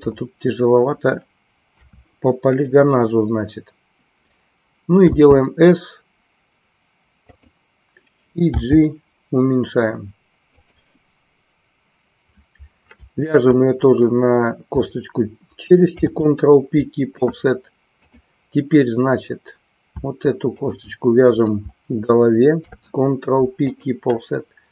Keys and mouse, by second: 1.7 KP_3, 13.3-14.3 shift+drag, 18.3 click, 20.5-21.5 shift+drag.